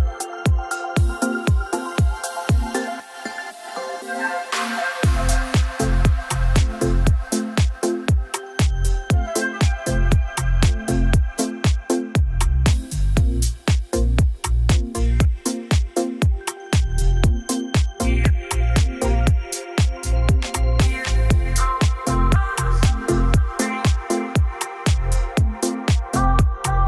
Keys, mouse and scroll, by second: 0.0-1.0 scroll down 13, 1.0-1.7 scroll up 17, 2.6 click, 3.2 click, 4.0 click, 4.0 click, 5.4 click, 6.7 click, 8.9 click, 9.5-10.2 scroll down 8, 10.2-11.3 scroll up 7, 10.3 e, 11.3 click, 11.6-12.7 scroll down 15, 12.9-14.6 scroll up 24, 14.6 click, 14.9-15.8 scroll down 12, 15.9 scroll up 1, 16.1 scroll down 1, 16.3-17.3 scroll, 18.2 click, 18.6 click, 18.7 click, 18.9 click, 20.5 click, 21.8 click, 23.6 click, 24.6 p, 26.3 click, 26.4-26.8 typing.